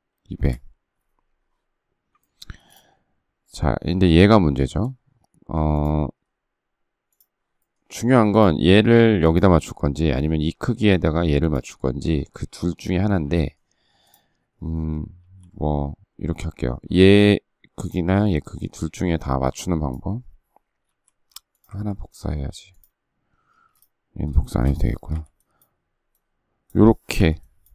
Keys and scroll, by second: 0.0 Return, 2.3 space, 14.9 alt+t, 20.6 m, 23.3 space, 24.9 Delete, 26.9 Delete.